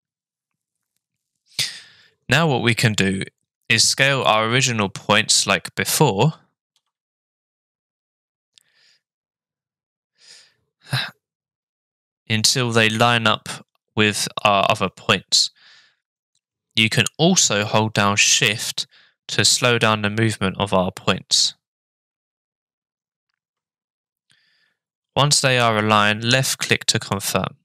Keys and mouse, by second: 6.7 s.